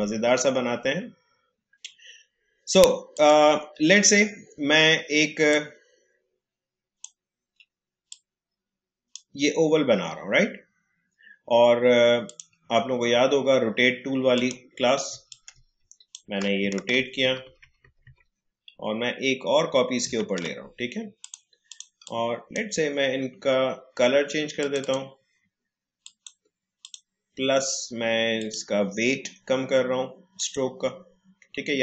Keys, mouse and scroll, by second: 3.1-11.7 drag, 12.2-16.9 drag, 16.9 ctrl+d, 21.2-24.5 drag.